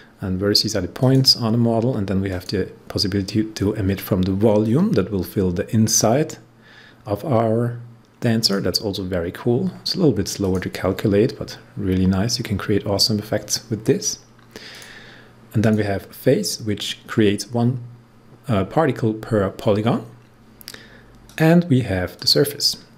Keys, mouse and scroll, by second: 2.2 click, 4.6-10.3 drag, 12.1-12.9 scroll down 1, 12.9-13.5 scroll up 1, 14.7 click, 15.5 click, 21.2-22.9 drag.